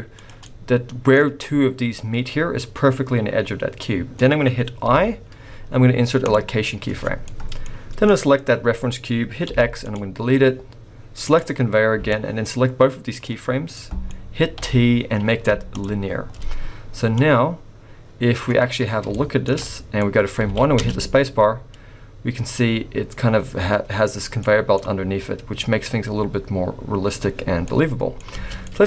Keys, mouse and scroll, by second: 0.4 scroll up 1, 0.5 middle click, 3.4-3.8 scroll down 4, 3.8 middle click, 4.2-4.8 scroll up 1, 4.8 i, 6.8-7.3 scroll down 5, 7.3 middle click, 8.0 click, 9.5 x, 11.3 click, 12.1 click, 13.7 middle click, 14.5 t, 16.3-16.8 scroll down 4, 17.2 click, 18.7-19.1 scroll up 8, 19.1 shift+middle click, 19.6 middle click, 20.0-20.4 scroll up 2, 20.4 alt+a, 20.8 space, 24.3 scroll down 2, 24.4 middle click, 27.7 middle click, 28.3 space, 28.6 middle click.